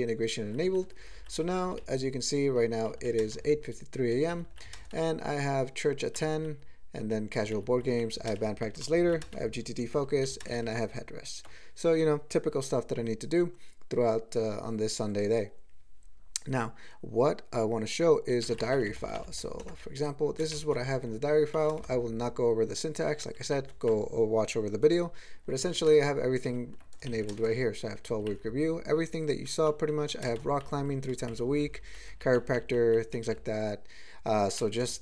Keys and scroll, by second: 0.8 ctrl+n, 1.0 ctrl+n, 1.1 ctrl+n, 1.4 ctrl+e, 1.7 ctrl+g, 1.8-2.6 ctrl+p, 2.9 ctrl+n, 3.1 ctrl+a, 3.2 ctrl+space, 3.3 ctrl+e, 4.1 ctrl+g, 4.3 ctrl+n, 4.5 ctrl+n, 4.7 ctrl+a, 4.7 ctrl+space, 4.9 ctrl+e, 6.2 ctrl+n, 6.4 ctrl+n, 7.0 ctrl+e, 7.4 ctrl+g, 7.5 ctrl+n, 7.7 ctrl+n, 7.9 ctrl+n, 8.1 ctrl+a, 8.3 ctrl+space, 8.4 ctrl+e, 8.7 ctrl+g, 8.9 ctrl+n, 9.0 ctrl+n, 9.1 ctrl+a, 9.2 ctrl+space, 9.3 ctrl+e, 9.8 ctrl+g, 9.9 ctrl+n, 10.1 ctrl+n, 10.3 ctrl+a, 10.4 ctrl+space, 10.5 ctrl+e, 10.8 ctrl+g, 20.5 alt+shift+,, 21.6 ctrl+n, 21.7 ctrl+space, 21.8 ctrl+e, 23.1 ctrl+g, 23.4 ctrl+n, 25.7 ctrl+p, 25.9 ctrl+space, 26.5 ctrl+g, 27.1 alt+m, 27.3 ctrl+space, 27.4 ctrl+e, 28.1 ctrl+g, 28.3 ctrl+n, 28.5-29.1 ctrl+n, 29.3 ctrl+n, 29.5 ctrl+n, 29.9 ctrl+p, 30.2 ctrl+a, 30.3 ctrl+space, 30.4 ctrl+e, 30.7 ctrl+n, 30.8 ctrl+n, 31.1 ctrl+g, 31.3 ctrl+n, 31.5 ctrl+n, 31.7 ctrl+n, 31.8 ctrl+n, 32.1 ctrl+e, 32.2 ctrl+n, 32.4 ctrl+n, 32.6 ctrl+n, 32.8 ctrl+n, 33.0 ctrl+n, 33.3-34.1 ctrl+p, 34.8-35.0 ctrl+n.